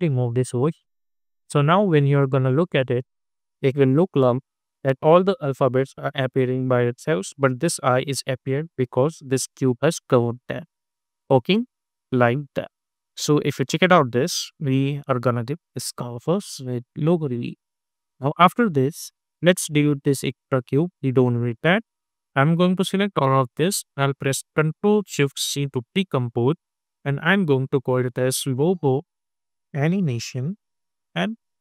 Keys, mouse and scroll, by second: 1.0 click, 3.1 space, 7.7 space, 10.7 click, 11.4 space, 17.1 space, 17.3 click, 18.1 u, 18.6 u, 20.3-25.7 drag, 25.7 ctrl+shift+c, 27.8-31.6 typing.